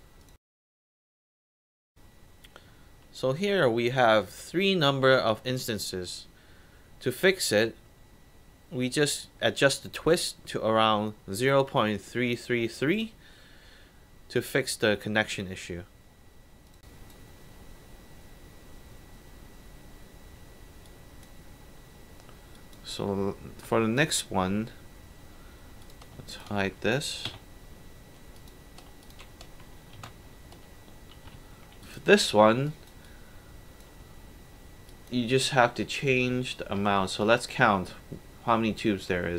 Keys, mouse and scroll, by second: 0.4-1.2 alt+drag, 1.6 middle click, 1.6 scroll down 2, 2.0-3.0 alt+drag, 3.2 alt+right drag, 3.5 alt+middle click, 5.2 alt+drag, 5.6 alt+right drag, 6.2-8.2 alt+drag, 8.9 alt+right click, 9.3 alt+drag, 9.7 alt+right drag, 12.7 alt+click, 13.0 alt+right click, 13.4 alt+click, 15.7 alt+right click, 16.1-16.6 alt+drag, 16.8 alt+right drag, 20.9 click, 22.5 click, 24.0 click, 25.8 shift+click, 26.3 shift+click, 27.3 shift+h, 28.4 click, 29.0 click, 30.0 shift+h, 31.3 w, 31.5 middle click, 31.6 scroll up 2, 31.8 alt+click, 32.3 alt+middle drag, 32.7 alt+right click, 33.0-33.8 alt+drag, 34.5-34.9 scroll down 3, 34.9 alt+click, 36.9 alt+middle drag, 37.2 alt+right drag.